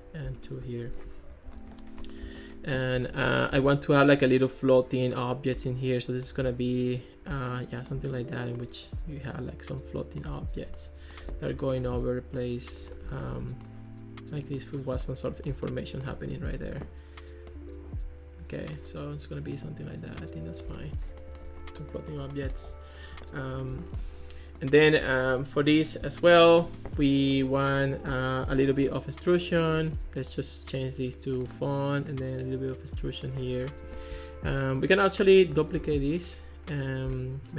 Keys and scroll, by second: 0.3 2, 0.5 Return, 3.6 super+d, 13.3 super+d, 35.8 super+d, 37.3 shift+c.